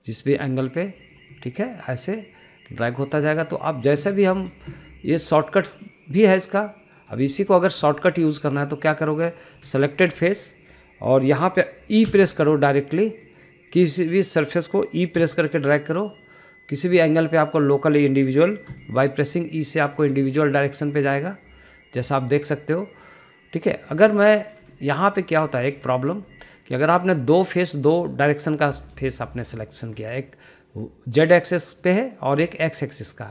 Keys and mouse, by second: 1.0 click, 1.7 click, 2.3 middle click, 5.2 middle click, 6.5 middle click, 7.3 click, 8.1 shift+middle click, 8.4 middle click, 8.9 shift+middle click, 9.1 middle click, 9.9 click, 10.2 middle click, 10.6 shift+middle click, 11.2 shift+middle click, 13.0 e, 15.0 middle click, 16.0 e, 17.9 middle click, 19.6 e, 21.0 middle click, 21.8 click, 22.2-23.3 middle drag, 25.0 shift+middle drag, 25.6 shift+middle click, 26.5 shift+middle click, 26.7 middle click, 27.6 shift+click, 28.1 middle click, 28.7 middle click, 29.9 shift+middle click, 30.1 middle click, 30.6 middle click, 32.4 middle click.